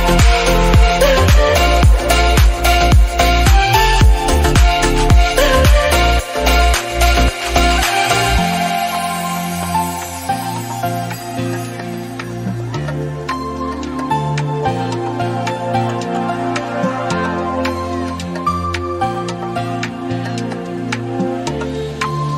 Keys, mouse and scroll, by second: 2.4 click, 2.7 scroll up 2, 2.9 middle click, 3.5-3.8 scroll up 2, 3.8 shift+middle click, 4.1 click, 4.4 Tab, 4.5-5.5 scroll up 1, 6.0 ctrl+r, 7.0 scroll up 1, 7.5 shift+middle click, 8.1 s, 10.4 /, 10.7 shift+middle click, 11.1-11.4 scroll up 1, 11.4 click, 11.7 shift+middle click, 12.3 3, 12.6 click, 13.0 ctrl+KP_Add, 13.7-14.5 scroll up 1, 14.5 click, 15.0 ctrl+r, 16.1 /, 16.3-17.5 scroll up 1, 18.0 click, 19.1 s, 20.7 /, 20.9 shift+middle click, 21.2-21.6 scroll up 1, 21.6 3, 21.9 click, 22.2 ctrl+KP_Add.